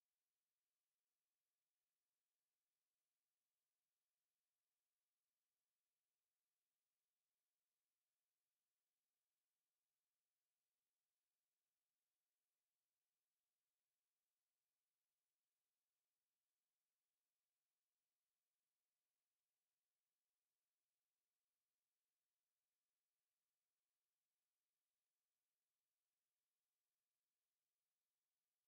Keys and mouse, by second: 0.7 right click, 1.9-4.0 right drag, 3.3 click, 4.2 click, 4.2 right click, 7.9 a, 8.4 middle click, 9.0 KP_7, 10.3 KP_5, 12.6 z, 13.8 b, 15.6 x, 18.7 KP_3, 21.9 b, 24.4 x, 27.9 middle click.